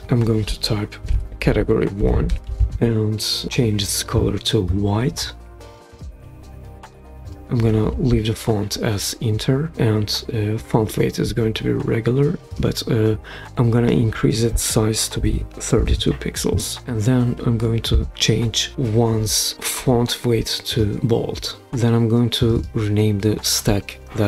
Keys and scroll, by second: 0.0-2.5 typing, 14.9-16.3 typing, 16.4 Return.